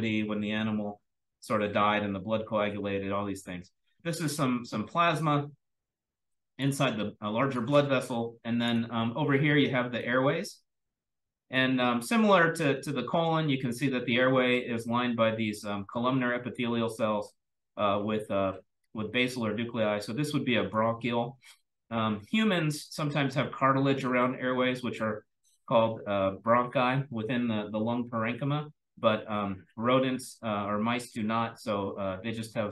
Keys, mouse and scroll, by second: 1.0-2.6 scroll up 1, 2.6-3.2 scroll up 1, 3.2-4.8 scroll up 1, 4.8-6.1 scroll up 1, 6.1-6.6 drag, 6.1-10.0 scroll down 3, 7.4-8.6 drag, 10.0-10.4 drag, 10.0-10.9 scroll up 2, 10.9-11.4 drag, 10.9-12.0 scroll up 1, 12.0-16.3 scroll up 1, 16.3-19.3 scroll up 1, 19.3-20.6 scroll up 1, 20.6-21.0 drag, 20.6-24.2 scroll down 1, 21.6-21.9 drag, 22.9 drag, 24.2 click, 28.9 click, 29.8-30.4 drag, 31.4-32.3 drag.